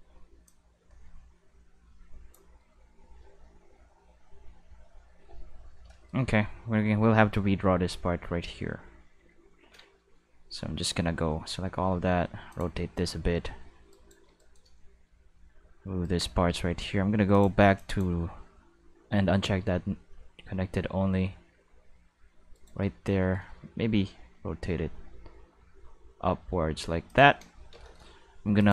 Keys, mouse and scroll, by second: 0.5-2.3 drag, 3.5 q, 5.1 middle click, 7.4 Tab, 9.0 middle click, 9.2 a, 11.1 r, 12.5 click, 13.9 right click, 14.4 shift+right click, 15.1 g, 16.0 right click, 17.3 click, 17.8 click, 19.1 g, 20.6-22.5 middle drag, 22.5 right click, 22.6 middle click, 23.2 shift+middle click, 23.5 r, 27.1 click, 28.6 click.